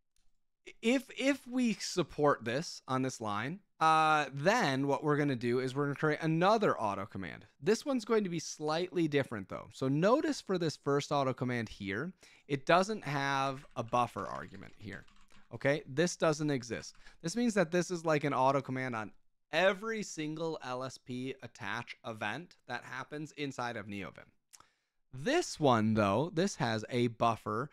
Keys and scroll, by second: 12.8 Escape, 12.8-16.9 typing.